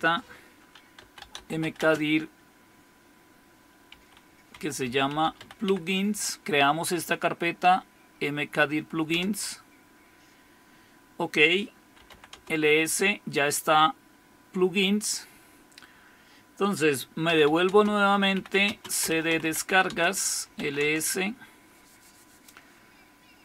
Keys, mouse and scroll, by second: 0.0 click, 0.7-2.1 typing, 3.9-6.1 typing, 9.1 Return, 11.8-12.6 typing, 17.2-21.0 typing.